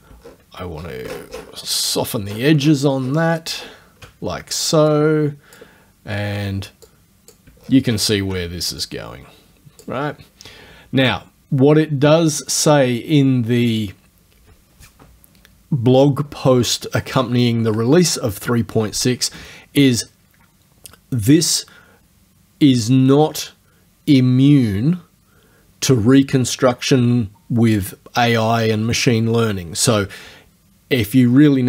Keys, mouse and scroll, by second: 0.2 shift+scroll down 1, 0.8 shift+scroll up 1, 1.2-1.7 shift+scroll down 1, 2.3-3.0 shift+scroll down 1, 3.6 shift+scroll down 1, 5.0-5.8 drag, 6.9-7.5 drag, 7.6-8.2 shift+scroll down 4, 8.9 click, 13.8 click.